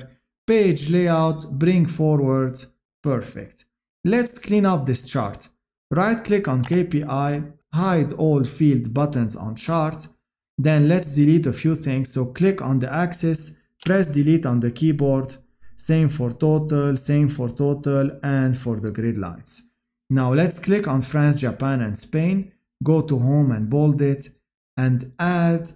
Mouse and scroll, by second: 6.9 right click.